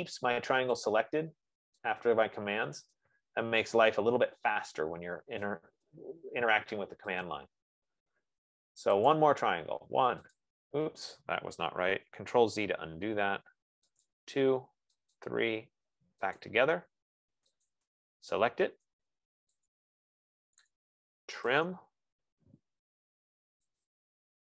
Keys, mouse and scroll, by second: 0.0-1.4 typing, 1.3 click, 2.6 F15, 3.7 right click, 3.9-4.7 scroll, 4.7-5.4 scroll, 5.9 right click, 7.6 click, 9.5 click, 13.0 ctrl+z, 14.4 click, 16.0 click, 16.8 click, 21.2-22.3 typing, 24.1 click.